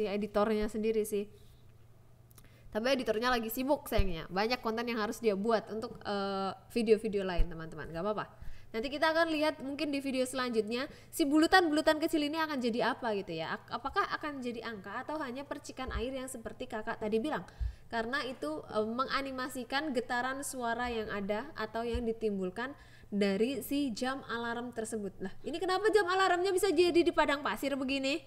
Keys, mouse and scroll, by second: 0.1 click, 0.6 g, 0.8 z, 1.1 click, 1.4 click, 1.8 click, 2.4 g, 2.4 z, 2.7 click, 3.0 g, 3.2 x, 3.6 click, 4.5 click, 4.9 g, 5.0 x, 5.6 click, 6.1 click, 14.2 g, 14.4 x, 15.0 y, 15.6 click, 16.2 KP_0, 17.7 ctrl+s, 19.2 click, 19.6 click, 20.8 click, 25.2 click, 25.9-26.9 drag.